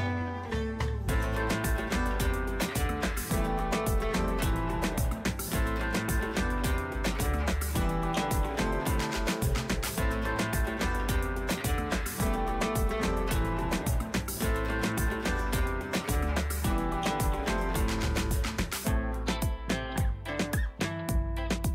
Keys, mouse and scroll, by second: 4.3 space, 4.7-7.5 ctrl+drag, 7.5 scroll up 1, 8.4 scroll down 1, 8.9 space, 9.1 right click, 9.3 click, 9.4 click, 10.5 space, 11.0-14.0 ctrl+drag, 14.0 right click, 14.8 click, 17.3 c, 18.2 click, 19.3 space, 19.8-21.3 ctrl+drag, 21.3 right click, 21.5 click.